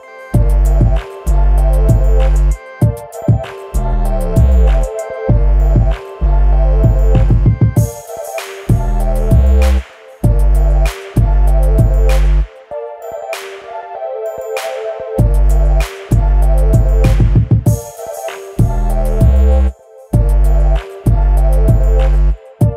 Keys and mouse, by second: 1.6-4.5 drag, 4.7 ctrl+z, 5.3 Tab, 6.6 a, 7.1-9.7 drag, 9.8 ctrl+z, 9.9 ctrl+z, 10.2 ctrl+z, 11.1 Tab, 11.6 Tab, 12.1-12.6 middle drag, 13.6 ctrl+i, 14.8 h, 15.6 click, 16.3 KP_7, 17.0 Tab, 17.6-21.1 drag, 21.6 Tab.